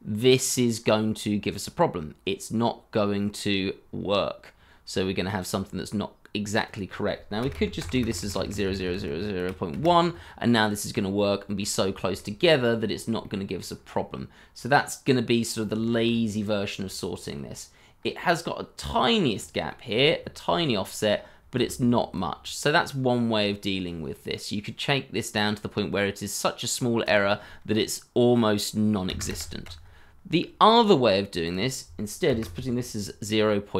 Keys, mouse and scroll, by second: 0.8 scroll up 1, 7.4 0, 7.5 ., 7.8 0, 9.4 1, 9.7 Return, 11.2 shift+middle click, 11.6-12.1 shift+scroll up 2, 12.1 shift+middle click, 12.4 scroll up 1, 13.2 shift+middle click, 13.7 shift+scroll up 2, 14.3-15.4 scroll down 1, 15.4-15.7 scroll up 1, 15.8 shift+middle click, 16.0 scroll up 1, 16.8 shift+middle click, 17.4 shift+scroll up 2, 19.3-21.1 scroll up 1, 21.5 shift+z, 29.0 KP_0, 29.2 KP_Enter, 32.2 0, 32.4 ..